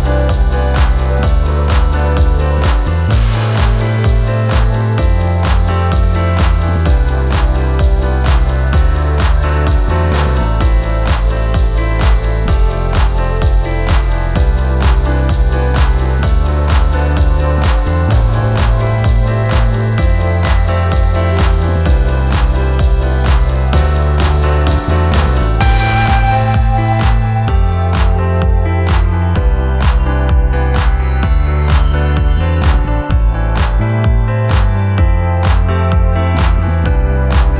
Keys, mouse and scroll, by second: 0.7 click, 1.6 click, 2.8 alt+click, 3.3 scroll up 1, 3.5 alt+click, 4.0 scroll down 2, 4.4 alt+middle click, 4.7 alt+click, 5.1 alt+middle click, 5.8 click, 7.2 click, 11.2 click, 13.9-15.8 drag, 16.8 alt+click, 17.2 scroll up 2, 17.4 alt+middle click, 17.7 scroll down 2, 17.9 alt+click, 18.3 scroll down 2, 18.5 alt+middle click, 18.8 scroll up 1, 19.1 alt+click, 19.6 alt+middle click, 21.9 click, 22.4 click, 23.5-26.7 drag, 27.3-31.8 drag, 32.8-36.0 drag, 36.9 click.